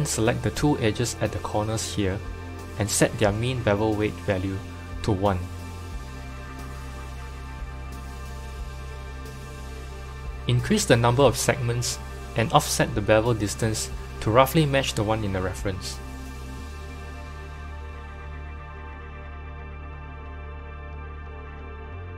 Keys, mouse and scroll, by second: 2.0 shift+click, 2.1 middle click, 2.5-2.8 scroll down 3, 2.8-4.7 middle drag, 4.7 n, 5.8-7.9 drag, 7.9-10.9 middle drag, 11.8-17.6 drag, 20.0-21.1 scroll down 3, 21.1 KP_7.